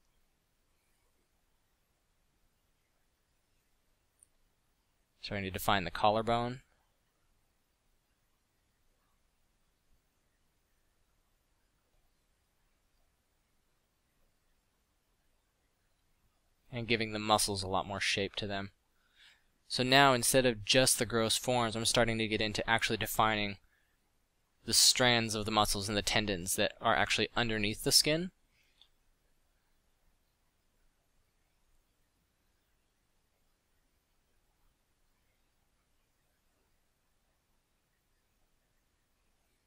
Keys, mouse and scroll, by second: 0.5 f, 3.3 f, 3.5 f, 12.9-14.0 middle drag, 19.8 f, 20.0-21.1 drag, 26.3 f, 31.0 middle click, 33.2 f, 39.0 middle drag.